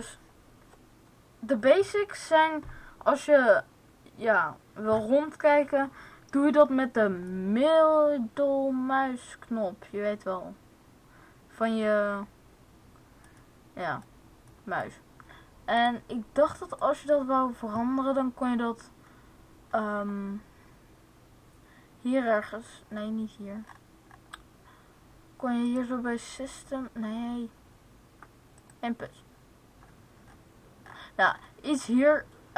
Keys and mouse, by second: 7.6-9.4 middle drag, 13.5-17.5 middle drag, 15.7-17.5 drag.